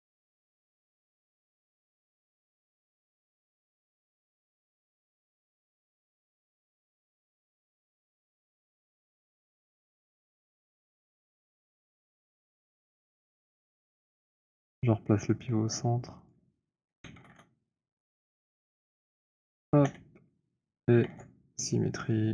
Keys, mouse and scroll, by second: 2.2 shift+right click, 3.7 z, 8.2 shift+right click, 9.8 alt+d, 10.1 alt+f, 10.8 w, 11.2-12.0 scroll, 13.6 alt+click, 13.7 middle click, 14.2 Insert, 14.8 scroll, 16.5 click, 16.9 typing, 18.5 Return, 19.7 Insert, 21.1 ctrl+shift+d, 21.8 scroll, 22.0 Tab, 22.0 middle click, 22.2 typing.